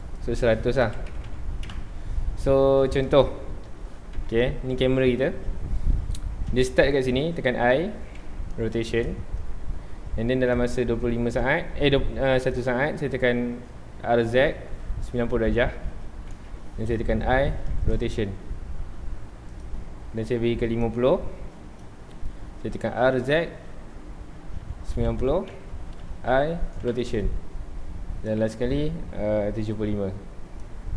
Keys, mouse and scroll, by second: 0.0-1.2 drag, 1.2 KP_0, 1.7 KP_Enter, 2.8 scroll down 1, 3.0-4.1 middle drag, 4.1 KP_0, 10.5-16.4 drag, 16.4 KP_Enter, 17.2 i, 20.8-22.8 drag, 22.8 r, 25.6 KP_Enter, 26.3 i, 26.9 KP_Enter, 28.3-30.9 drag.